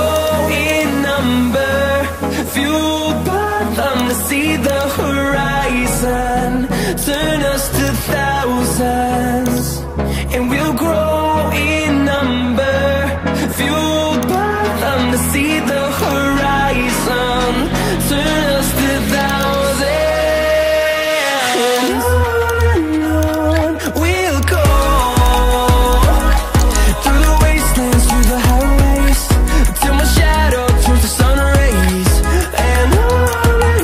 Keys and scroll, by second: 32.3-33.0 typing.